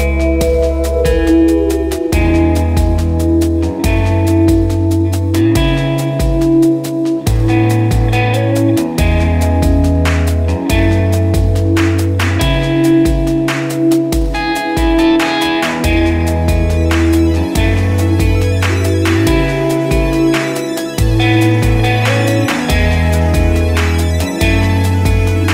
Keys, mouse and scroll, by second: 0.2 right click, 0.5 click, 1.0-1.6 scroll up 1, 2.2 click, 2.7-3.1 scroll down 1, 3.4 click, 4.7 scroll up 1, 5.6 click, 7.3-7.6 scroll up 1, 7.9 click, 10.0 ctrl+right click, 10.8 click, 11.1 click, 13.6-13.9 scroll down 1, 14.3 click, 15.5-15.8 scroll up 1, 16.1 click, 16.5 scroll down 1, 17.2-20.2 drag, 20.2 ctrl+g, 20.5 click, 21.4 F4, 22.6 F9.